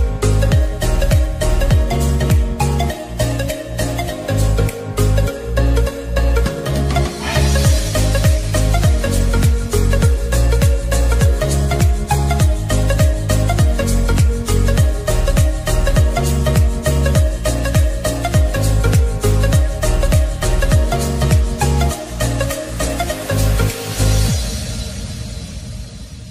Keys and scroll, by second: 9.5 ctrl+t.